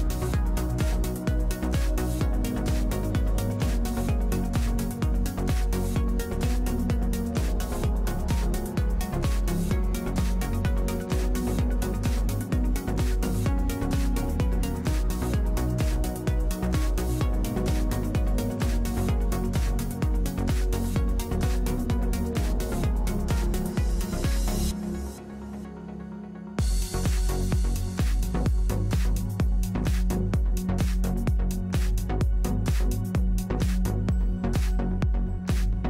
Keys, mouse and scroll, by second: 0.1 click, 2.3-5.0 drag, 3.6 h, 4.2 right click, 5.0 k, 5.9 click, 6.3-7.7 drag, 12.9-14.4 middle drag, 16.8 f, 19.4 f, 24.3 f, 29.4 f, 30.3-34.0 drag, 34.0-35.8 middle drag.